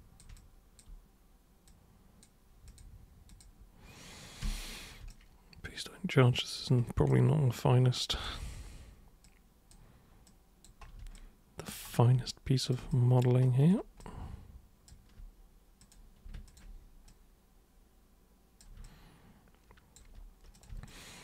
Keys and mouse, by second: 0.4-0.8 alt+super+drag, 1.7 super+click, 2.7 super+click, 3.3 super+click, 4.4 super+f, 5.1-6.6 alt+super+drag, 7.1-8.3 alt+super+drag, 9.3 super+click, 10.3 super+click, 11.1-11.7 alt+super+drag, 12.6 super+click, 12.9 alt+super+click, 14.0 alt+super+click, 15.8 super+click, 16.5 ctrl+shift+super+click, 17.1-18.6 super+drag, 18.9-19.9 alt+super+drag, 20.6 super+click, 20.9 alt+super+click.